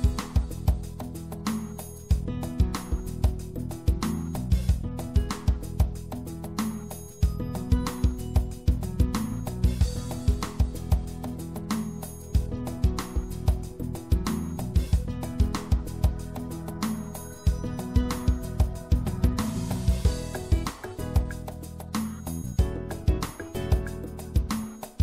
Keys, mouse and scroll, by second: 1.2 ctrl+r, 6.9 click, 7.8 right click, 8.7-10.6 drag, 10.0 i, 13.4 ctrl+z, 14.7-16.1 drag, 16.1 middle click, 20.7-23.2 middle drag, 24.0-25.0 middle drag.